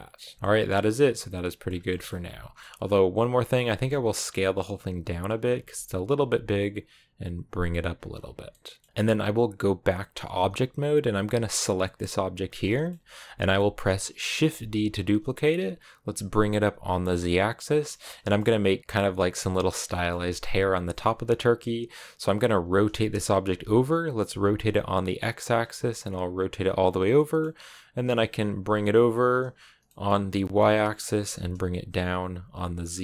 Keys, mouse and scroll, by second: 0.1 middle click, 0.8 scroll down 1, 0.9 middle click, 1.5 scroll up 2, 1.7 middle click, 2.0 Tab, 2.2 scroll up 1, 2.4-3.5 middle drag, 3.5 s, 5.5 g, 7.8 Tab, 7.9-8.3 scroll down 4, 8.1 a, 8.3 middle click, 8.6 a, 8.8-11.5 middle drag, 11.5 right click, 11.8-14.3 middle drag, 14.3 shift+d, 17.7 shift+middle click, 17.9 scroll up 1, 18.1-22.3 middle drag, 22.3 r, 27.0 middle click, 27.7 g, 31.0 g.